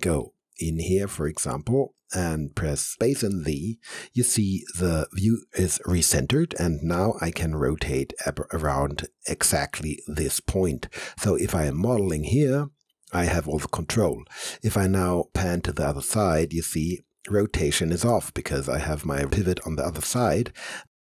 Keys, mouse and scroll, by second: 0.1 alt+middle click, 0.8 alt+right click, 1.9 alt+middle click, 2.9 space, 3.5 z, 7.2-13.3 alt+drag, 13.4 alt+click, 13.5 alt+click, 15.1 alt+middle click, 16.7-20.2 alt+drag, 20.2 alt+middle click, 20.7 alt+click.